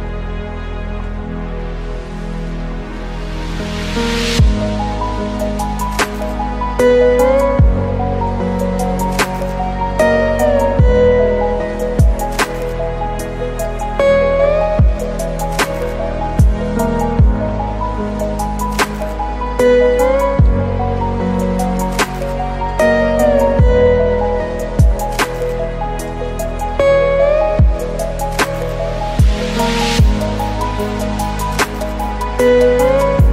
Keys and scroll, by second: 2.3 ctrl+t, 2.6 ctrl+space, 7.1 ctrl+t, 12.1 ctrl+z, 17.0 ctrl+u, 21.2 ctrl+t, 24.0 ctrl+space.